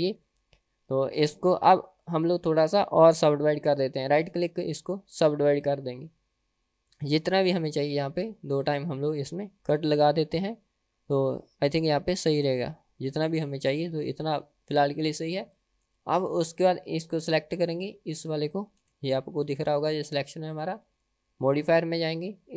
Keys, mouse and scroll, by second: 0.1 Tab, 0.7 Tab, 1.6 Tab, 2.3 Tab, 3.2 a, 4.2-5.6 right drag, 8.8 click, 12.3 click, 14.0 Tab, 15.6-16.0 shift+middle drag, 16.5 click, 17.3 click, 18.9 g, 21.6 click.